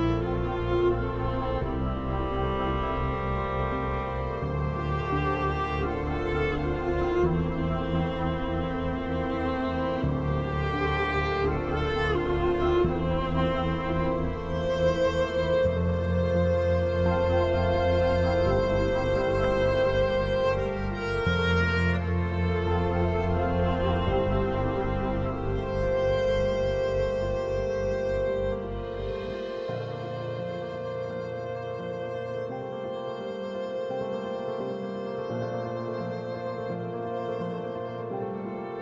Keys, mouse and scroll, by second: 8.4 right click, 10.6-18.6 drag, 22.3 right click, 23.5-29.4 drag, 32.0 shift+Page_Down, 32.7-38.8 drag.